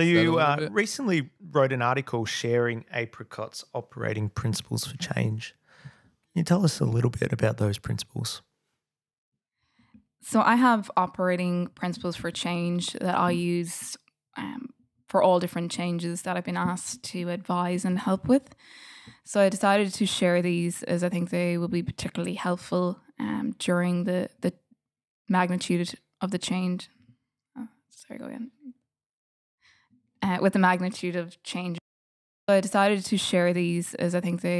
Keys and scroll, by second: 0.0 f.